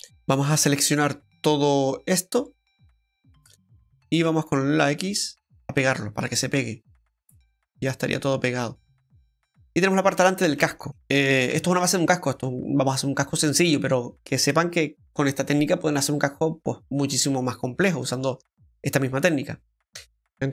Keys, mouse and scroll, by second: 0.1 click, 2.5 click, 2.5 right click, 2.8 alt+shift+right click, 4.2 click, 4.2 alt+shift+right click, 6.2 middle click, 9.1-10.0 scroll down 4, 9.5 middle click, 10.0 scroll up 1, 10.6 middle click, 10.6-10.9 scroll up 3, 10.9 shift+middle click, 10.9 scroll down 1, 11.0-11.5 scroll up 1, 11.5 Tab, 17.0-17.4 scroll up 2, 17.5 middle click, 18.1 shift+middle click, 20.2 click, 20.2 middle click, 20.2-20.5 scroll down 3.